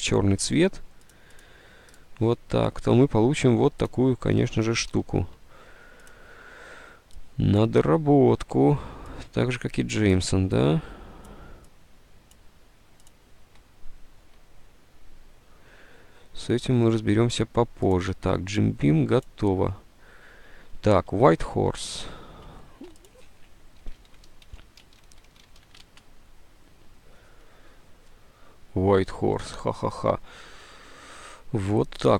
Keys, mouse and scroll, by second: 4.5 ctrl+z, 5.0 ctrl+z, 21.9 alt+Tab, 23.7-26.1 typing, 29.2-29.9 typing.